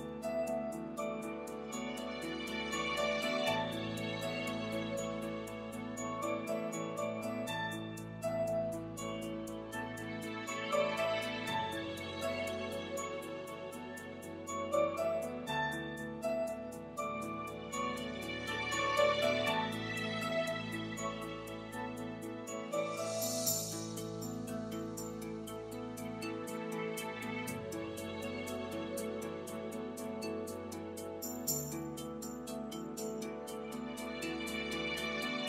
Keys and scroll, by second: 24.8 ., 26.1 8.